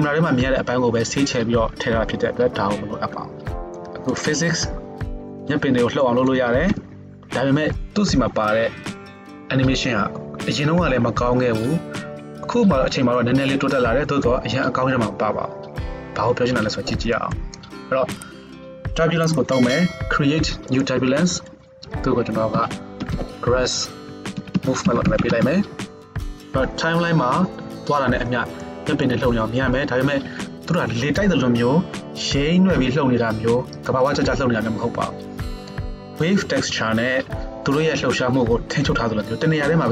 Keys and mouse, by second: 4.2-17.4 drag, 6.7 KP_0, 17.4-20.8 middle drag, 20.8-39.9 drag.